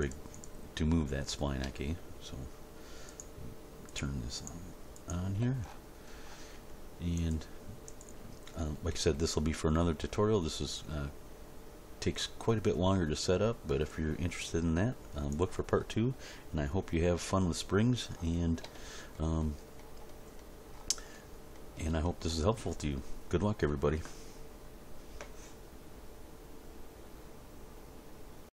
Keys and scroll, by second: 8.9 g.